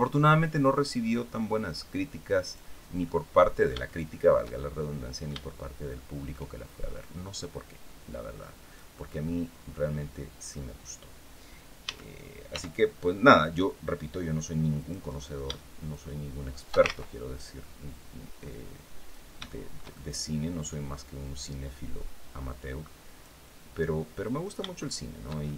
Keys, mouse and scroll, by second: 2.5 scroll down 2, 2.7 middle click, 4.6-6.2 middle drag, 6.7-8.6 drag, 8.8-10.3 middle drag, 11.5 s, 12.1 y, 14.5 click, 15.6 shift+click, 16.5 ctrl+shift+z, 17.0-19.0 ctrl+shift+drag, 19.2-20.5 shift+middle drag, 21.1-23.1 drag, 23.5 middle click, 24.5-25.5 shift+middle drag.